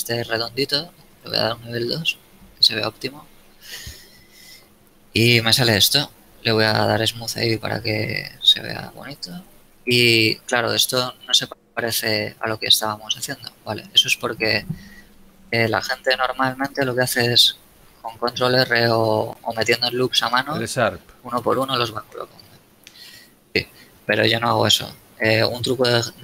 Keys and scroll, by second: 8.4 a, 9.3 ctrl+space, 13.7 Tab, 17.4 ctrl+r, 22.4 a.